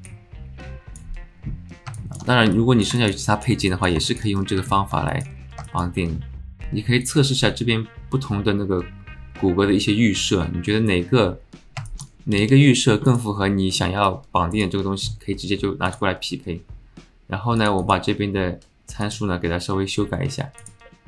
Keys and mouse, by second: 0.0 click, 2.0 alt+shift+click, 2.5 alt+click, 3.0 alt+shift+click, 3.2 alt+click, 3.7 alt+click, 4.0 alt+shift+click, 4.4 click, 4.6 alt+middle click, 5.1 shift+middle click, 5.6 alt+shift+middle click, 7.1-10.9 drag, 11.8 alt+shift+click, 12.4 s, 14.0 click, 15.9-21.0 drag.